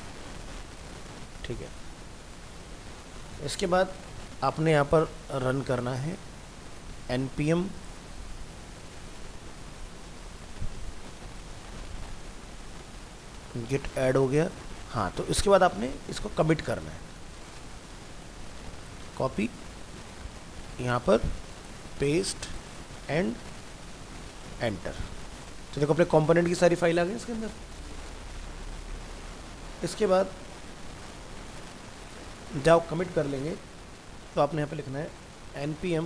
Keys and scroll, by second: 19.1 ctrl+c.